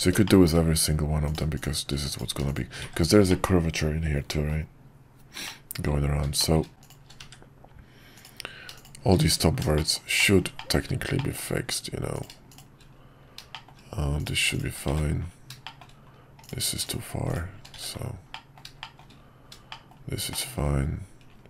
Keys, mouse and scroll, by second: 0.2 middle click, 1.5 click, 2.1 click, 3.3-4.5 middle drag, 5.5 middle click, 6.4 shift+middle click, 6.6 scroll down 1, 6.8 shift+click, 8.1 click, 8.8 click, 9.3 1, 9.8 middle click, 10.6 middle click, 13.5 shift+middle click, 14.2 click, 15.6 middle click, 16.8 shift+click, 17.8 1, 18.3 middle click, 18.8 middle click, 19.7-20.8 middle drag.